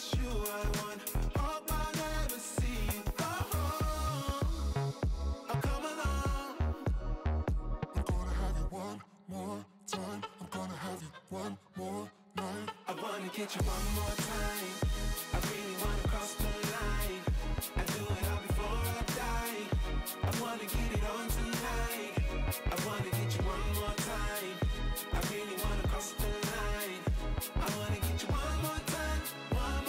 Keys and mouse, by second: 3.0 click, 4.4 ctrl+j, 5.2 right click, 5.6 click, 7.2 right click, 8.3 click, 10.7 click, 11.9 click, 12.1 click, 12.7 click, 13.8 click, 14.1 ctrl+i, 16.0 click, 16.1 space, 17.4 click, 18.5 click, 19.4 click, 19.9 x, 20.1 shift+click, 21.6 click, 21.9 click, 22.2 click, 22.4 click, 22.6 click, 23.0 space, 23.4 click, 24.0 click, 24.3 click, 24.6 space, 24.7 click, 24.9 click, 25.2 click, 25.7 click, 25.9 space, 26.0 click, 26.2 click, 26.4 click, 26.7 click, 27.0 click, 27.4 ctrl+z, 28.0 click, 28.6 click, 28.8 click, 29.2 click, 29.3 click.